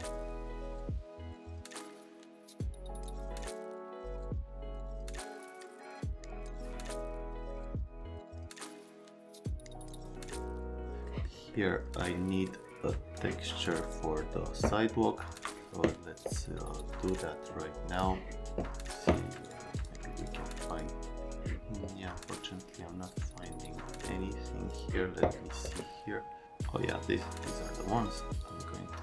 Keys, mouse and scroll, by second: 0.2 shift+click, 0.8 middle click, 1.2 alt+middle click, 1.5 alt+middle click, 2.3 click, 2.8 click, 3.1 middle click, 3.3 click, 3.3 alt+middle click, 3.6 alt+middle click, 3.8 click, 4.0 click, 4.5 click, 4.9 middle click, 5.3 click, 5.4 alt+middle click, 5.7 shift+click, 6.2 click, 6.3 middle click, 6.4 alt+middle click, 6.7 click, 7.2 click, 7.4 alt+middle click, 7.5 right click, 7.7 click, 8.0 middle click, 8.2 click, 8.4 click, 8.5 right click, 8.8 click, 9.1 scroll, 9.3 right click, 9.5 click, 9.6 click, 9.8 middle click, 10.1 shift+click, 10.7 click, 11.0 right click, 11.5 right click, 12.6 click, 13.8 click, 15.3 click, 17.9 click, 19.4 click, 19.8 click, 20.2 click, 20.7 middle click, 24.7 middle click, 28.4 click.